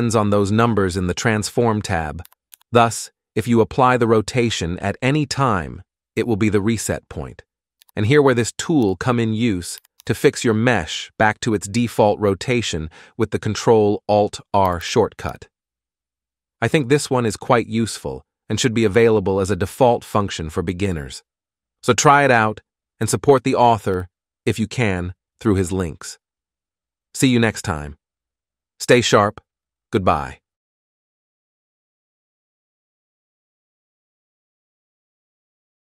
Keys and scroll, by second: 2.7 ctrl+a, 8.0 g, 8.7 r, 10.2 alt+r, 15.5 ctrl+alt+r, 24.1 n.